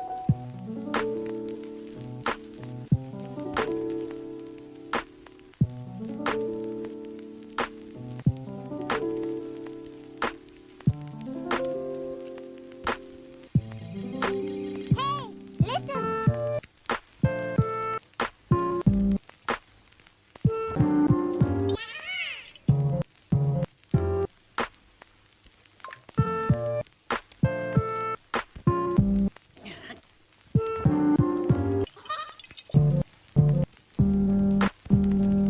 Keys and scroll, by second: 0.6 ctrl+z, 5.4 scroll down 1, 5.6 scroll up 1, 7.1 scroll down 1, 7.9 scroll up 1, 8.8 [, 10.8 ], 12.8 [, 18.9 ], 20.5 scroll down 1, 20.7-21.1 scroll up 1, 22.9 scroll down 1, 23.0-23.3 scroll up 1, 25.3 scroll down 1, 25.5-25.8 scroll up 1, 35.4 scroll down 1.